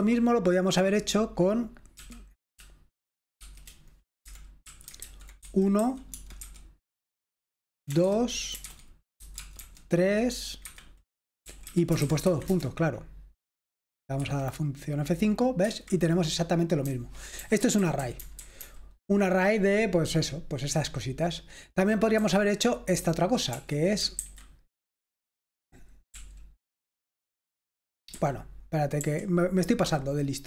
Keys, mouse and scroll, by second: 0.0-0.6 typing, 2.0 typing, 3.5-6.5 typing, 8.1-9.6 typing, 10.7 Escape, 11.3-12.6 typing, 14.3 F5, 15.8 Escape, 17.1-17.8 typing, 22.2 typing, 23.7-24.2 typing, 26.2 typing, 28.2-29.1 typing.